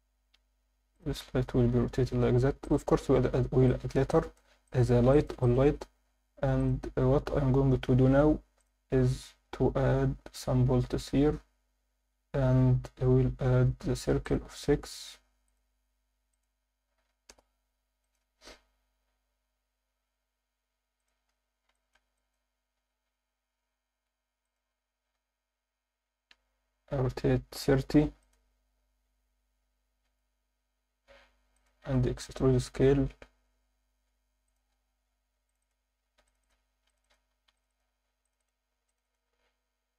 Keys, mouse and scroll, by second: 0.1 g, 0.9 drag, 1.7 r, 2.6 click, 3.0 scroll up 1, 3.6 scroll up 2, 3.7 alt+shift+middle drag, 4.1 ctrl+alt+middle drag, 4.6 alt+shift+middle drag, 5.1 ctrl+alt+middle drag, 5.4 click, 5.6 Tab, 6.6 click, 7.9 shift+s, 9.1 Tab, 9.3 scroll down 1, 15.5 click, 16.3-17.3 drag, 18.0 drag, 21.0 click, 21.2-21.8 scroll up 2, 21.8 alt+shift+middle click, 22.1 ctrl+alt+middle drag, 22.8 s, 24.4 click, 25.1 r, 28.2-29.3 drag, 29.3 Tab, 29.6-30.1 scroll up 1, 30.1 1, 31.1 s, 31.6 click, 31.8 e, 32.0 s, 34.5 click, 35.6 click, 36.1 ctrl+r, 36.4 click, 36.7 ctrl+r, 37.0 click, 37.3 ctrl+r, 37.7 click, 38.0 ctrl+r, 38.4 click, 38.7 ctrl+r, 39.0 click.